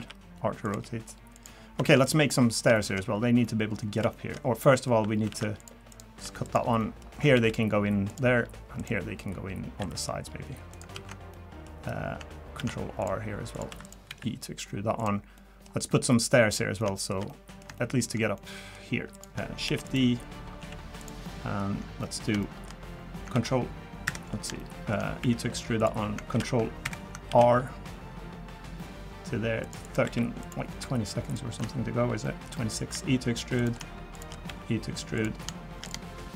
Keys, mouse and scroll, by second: 0.0-0.7 typing, 1.6 scroll down 2, 1.8 shift+middle click, 2.3 middle click, 2.7 shift+middle click, 3.0 scroll up 3, 3.4 middle click, 4.1 shift+middle click, 4.3 scroll up 1, 4.7 middle click, 5.3 ctrl+r, 6.2 3, 6.4 click, 6.8 middle click, 7.3 e, 8.8 click, 9.8 e, 10.9 ctrl+z, 11.3 middle click, 12.6 ctrl+r, 13.7 3, 13.8 click, 14.1 e, 15.4 middle click, 15.9 middle click, 16.3 middle click, 16.8 middle click, 17.3 middle click, 17.8 shift+middle click, 18.4 middle click, 19.1 click, 19.7 shift+d, 20.6 s, 22.0 middle click, 22.4 shift+middle click, 22.8-23.3 scroll up 3, 23.3 ctrl+r, 24.6 shift+middle click, 25.2 e, 26.7 e, 27.3 ctrl+r, 30.0 3, 30.4 click, 31.3 ctrl+shift+click, 32.2 middle click, 32.9 e, 34.1 shift+click, 34.5 e, 35.9 click.